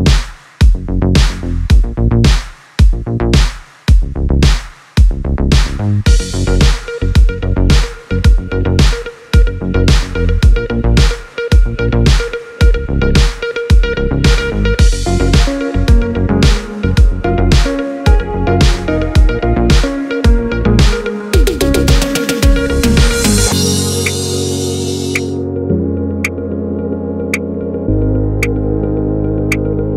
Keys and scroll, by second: 7.2 space.